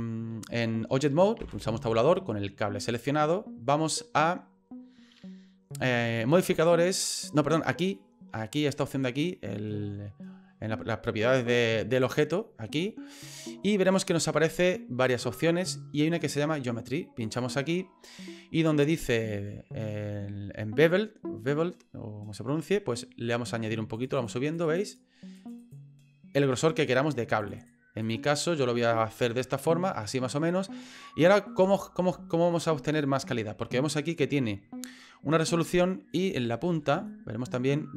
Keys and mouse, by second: 1.4 Tab, 12.0 click, 17.2 click, 24.0 click, 24.5 click, 24.6 click, 24.8 click, 25.4 click, 25.6 click, 27.4 click, 27.6 click, 28.0 click, 29.2 middle click, 30.0 middle click, 31.1 middle click, 31.7 middle click, 32.5 middle click, 35.9 middle click, 36.3 shift+middle click, 37.0 middle click.